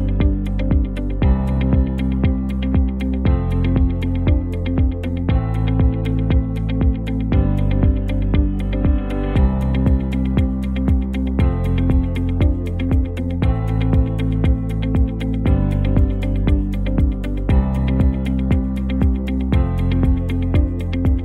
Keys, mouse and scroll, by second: 5.7-6.7 drag, 20.4-21.2 drag.